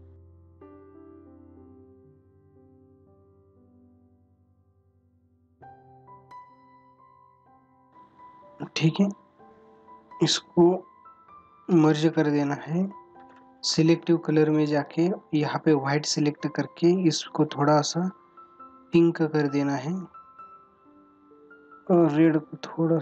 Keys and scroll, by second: 2.5 ], 3.0 space, 3.6 ], 5.2 ], 7.2 ctrl+=.